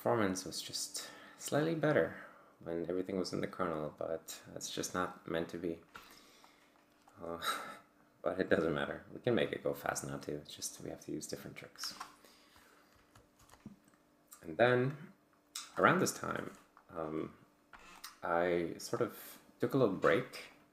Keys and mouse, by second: 6.5 click, 7.6 click, 9.7-10.9 drag, 13.3 ctrl+alt+g, 18.0 click.